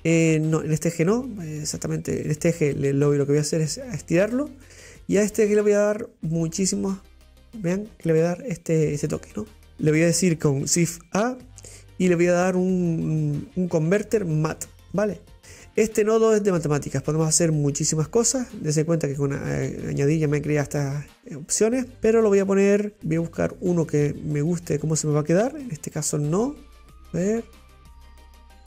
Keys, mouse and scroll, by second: 5.3-8.2 drag, 9.5 click, 12.3 click, 14.6 click, 19.0-19.6 scroll up 7, 19.6-22.9 middle drag, 23.9 middle click, 25.7-27.1 shift+middle drag, 27.1-28.6 drag.